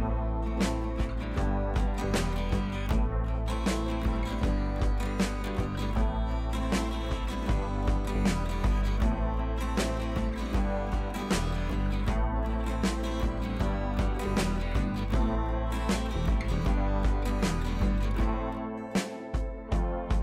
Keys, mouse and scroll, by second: 0.6 scroll down 1, 0.8-1.4 scroll up 1, 1.4 click, 2.4 ctrl+alt+shift+e, 4.5 click, 5.8 click, 9.0-12.4 drag.